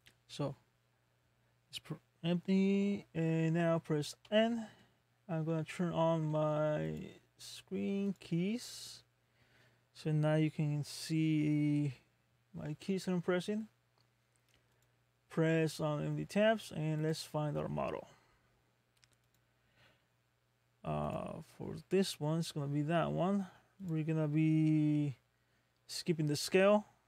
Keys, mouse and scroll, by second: 4.2 n, 10.0-10.5 scroll down 1, 10.5 scroll up 1, 14.8 click, 17.0 click.